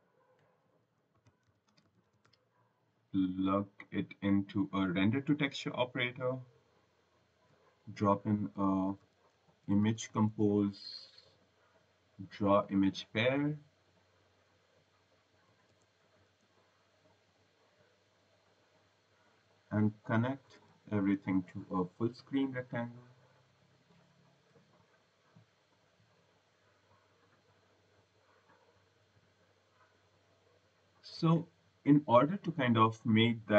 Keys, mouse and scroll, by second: 0.8-2.9 typing, 3.5 click, 4.7 click, 6.3 click, 8.4-10.4 typing, 11.5 click, 12.9 click, 15.1-16.6 typing, 17.3 click, 18.5 click, 19.8-21.7 typing, 23.5 click, 24.4 l, 25.8 click, 27.2 click, 28.7 click, 30.4 click, 31.0 click, 31.4 scroll, 31.7 right click.